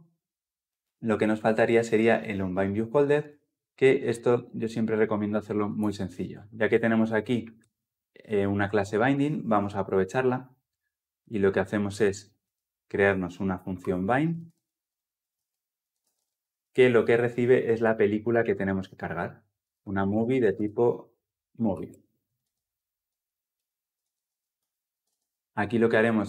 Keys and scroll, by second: 7.4 ctrl+[, 21.7 Return, 22.2 ctrl+alt+l, 22.3 ctrl+alt+o, 24.8 ctrl+alt+l, 24.9 ctrl+alt+o.